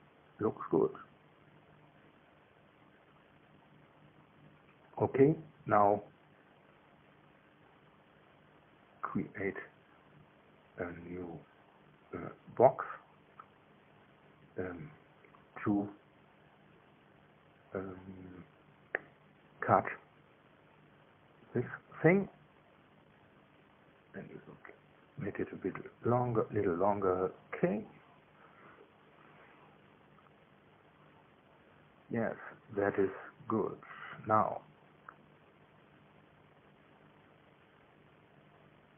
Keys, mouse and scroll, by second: 2.3 click, 5.5 click, 5.7-21.1 middle drag, 21.1 click, 21.5 middle click, 22.1 click, 24.5-26.0 drag, 28.4 click, 31.2 KP_1, 32.2 KP_3.